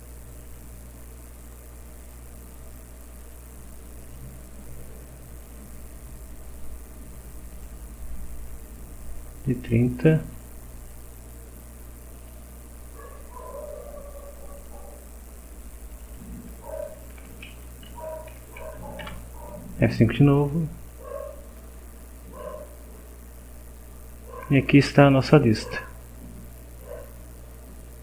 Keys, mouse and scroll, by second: 0.4 click, 3.2 click, 4.0 click, 5.4 click, 7.5 click, 10.3 click, 12.2 click, 14.6 click, 15.9 click, 17.1 3, 17.9 End, 18.3 Down, 19.0 F5, 20.9 click, 22.6-23.1 scroll down 1, 23.8-24.2 scroll down 1, 24.9-28.0 drag.